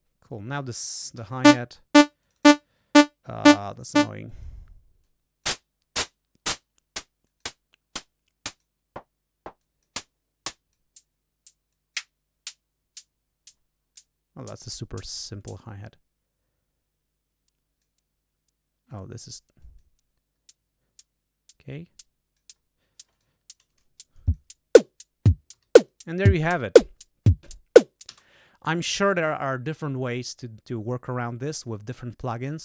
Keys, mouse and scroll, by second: 0.7 click, 1.1 l, 2.2 click, 3.6 click, 4.2 click, 5.0 click, 5.9 click, 6.5 click, 7.2 click, 8.5 click, 9.5 click, 10.5 click, 11.6-14.1 drag, 15.4-17.9 drag, 19.5 click, 20.2 scroll up 2, 21.7 click, 23.1 click, 24.2 click, 25.5 g, 28.0 space.